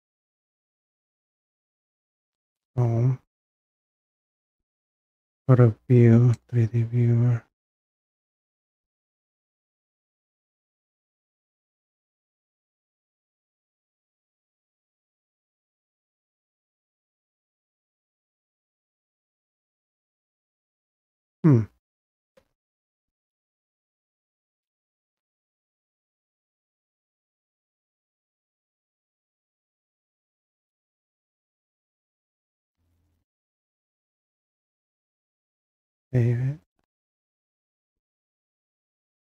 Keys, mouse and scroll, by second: 5.3 click, 6.4 click, 7.1 click, 9.5 scroll, 10.3 scroll, 13.5 click, 15.3-17.7 scroll, 17.8-18.1 scroll, 19.0 scroll, 21.3-21.8 scroll up 3, 24.3 scroll up 1, 24.6-26.1 scroll, 27.8 click, 31.1 scroll, 31.4 scroll down 1, 32.1-32.4 scroll down 1, 33.6-34.1 scroll down 1, 34.1-34.4 scroll up 1, 35.6 click, 36.7 click, 37.6 click.